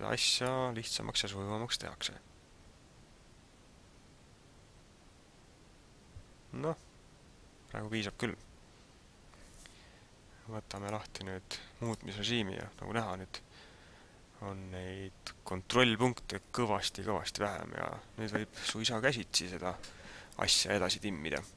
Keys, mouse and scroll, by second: 0.3 click, 10.7 click, 21.3 Tab.